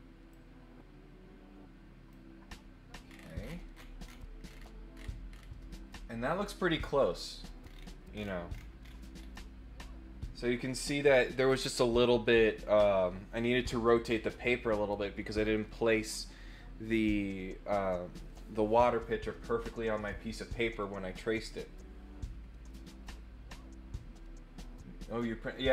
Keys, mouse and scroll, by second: 0.3-2.1 drag, 3.0-3.3 scroll up 2, 3.7-4.1 scroll down 4, 4.4-5.4 scroll up 6, 7.6-8.6 scroll down 6, 8.8-9.2 scroll up 4.